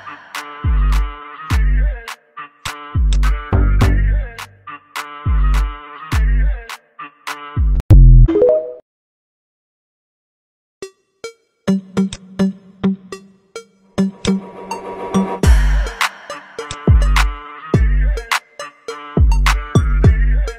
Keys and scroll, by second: 3.8 ctrl+c, 4.7 ctrl+f, 9.1 v, 19.3 ctrl+c, 19.9 ctrl+f.